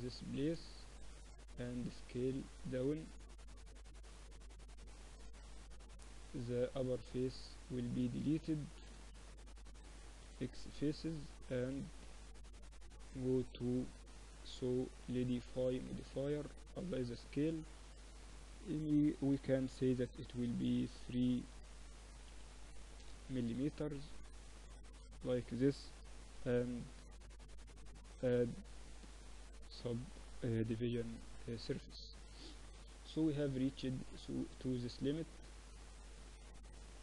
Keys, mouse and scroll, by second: 0.6 z, 1.2 middle click, 1.8 s, 3.1-6.2 drag, 5.3 z, 6.2-7.4 middle drag, 8.1 z, 8.5 middle click, 10.3 x, 11.7-13.0 middle drag, 12.0 Tab, 13.0-15.0 drag, 16.7 ctrl+a, 18.5-20.4 drag, 20.4 3, 21.2 BackSpace, 23.4 z, 24.1 z, 24.5-26.9 drag, 26.1 ctrl+3, 26.9 Tab, 28.1 ctrl+r, 29.9 Tab, 30.7 t, 31.7-33.3 drag, 31.7 t, 32.9 KP_1, 33.3-35.7 middle drag, 34.4 Tab, 35.7-37.0 drag, 36.0 a, 36.3 a, 36.6 a.